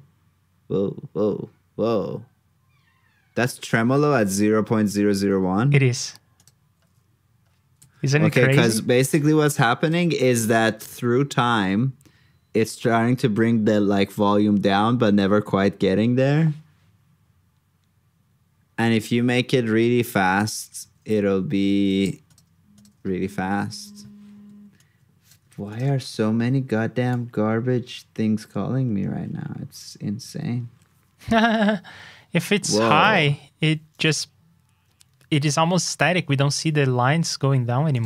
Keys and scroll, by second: 10.1 super+c, 10.5 super+v, 25.4 super+c, 25.8 super+v.